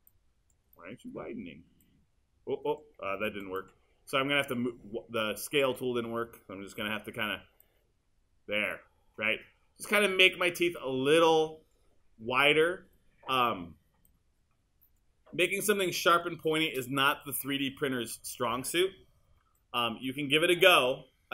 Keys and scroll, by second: 3.3 super+z, 6.8 w.